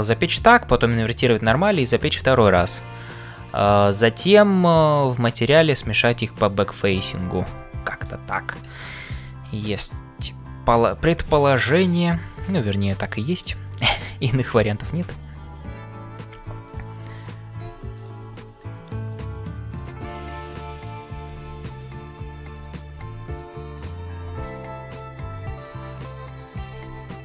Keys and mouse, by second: 7.1-8.2 middle drag, 8.8 shift+middle click, 12.9 middle click, 14.5 click, 17.6 g, 18.6 middle click, 20.3 middle click, 22.5 click, 23.0 g, 23.8 click, 24.2 g, 26.3 click, 26.7 g.